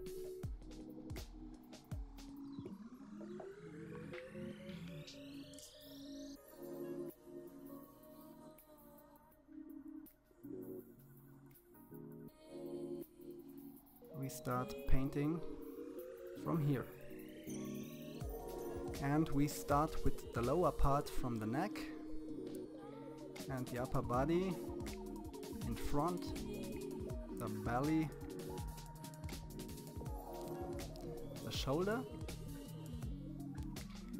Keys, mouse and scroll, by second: 1.0-2.5 drag, 8.1 click, 9.9-13.3 drag, 14.2-16.6 drag, 18.2 KP_3, 18.6 click, 19.3 click, 19.8 KP_1, 20.2 click, 21.8 click, 22.3 f, 22.7 click, 23.9 click, 24.6 KP_3, 24.9 KP_3, 26.9 click, 28.2 click, 28.9 click, 29.8 middle click, 30.6 click, 33.2 click.